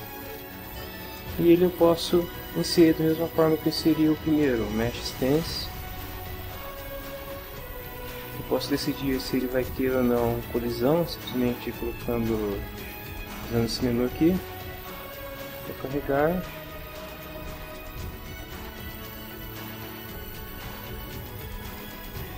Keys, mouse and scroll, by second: 2.4 click, 3.7 click, 4.7 click, 6.0 click, 6.6 click, 7.3-8.6 typing, 14.7 click, 15.5 click, 17.3 click, 18.5 click, 20.5-22.1 drag.